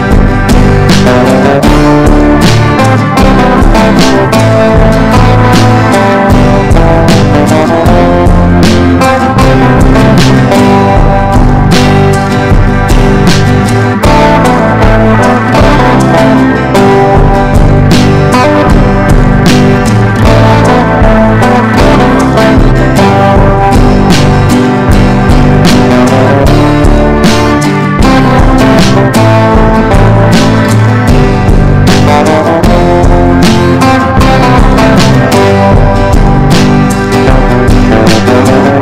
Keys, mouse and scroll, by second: 10.7 shift+click, 11.3 shift+click, 11.7 shift+click, 11.9 shift+click, 12.5 click, 16.3 ctrl+d, 17.0-36.6 drag, 36.7 Up, 36.8 Up, 37.8 ctrl+d.